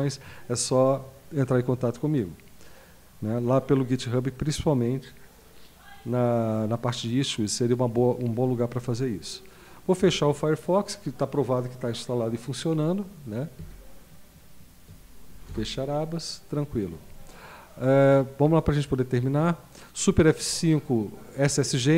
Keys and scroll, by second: 13.6 super+q, 15.5 Return.